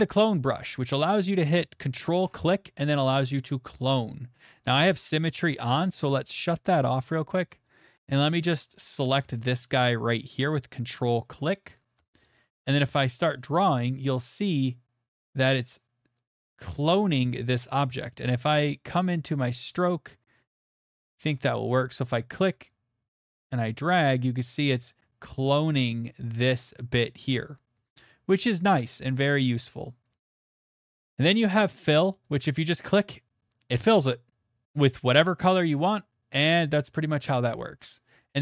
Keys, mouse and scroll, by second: 0.3 middle click, 1.9 ctrl+click, 2.8 click, 3.3 click, 3.6 click, 4.0 ctrl+click, 4.6 ctrl+click, 4.6-5.3 scroll, 5.7 click, 5.9 scroll, 6.6 click, 6.9 click, 7.9 middle click, 8.0 middle click, 9.0 ctrl+click, 9.1 ctrl+click, 9.6 middle click, 10.8 ctrl+click, 11.2 ctrl+click, 11.7 ctrl+click, 13.0 click, 13.5 click, 16.1 click, 16.8 middle click, 19.2 click, 19.8 click, 20.7 click, 21.3 middle click, 22.4 ctrl+click, 24.0 ctrl+click, 26.1 click, 27.9 click, 30.1 click, 30.3 click, 31.2 click, 32.3 click, 33.7 middle click, 34.6 middle click, 38.2 click.